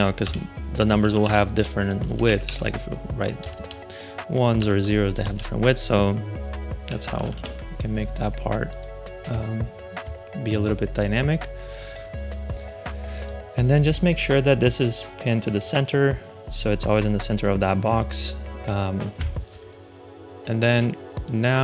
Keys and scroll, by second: 0.1 Return, 0.9 2, 1.8 BackSpace, 2.2 1, 3.3 BackSpace, 4.4 0, 5.0 BackSpace, 6.8 shift+x, 7.2 super+Return.